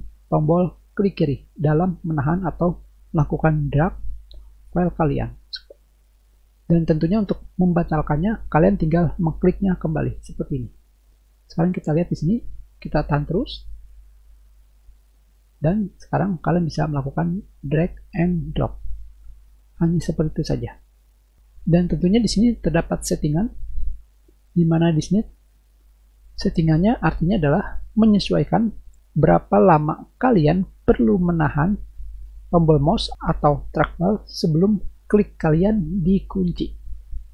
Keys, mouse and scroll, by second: 13.2-21.4 drag, 23.6 click.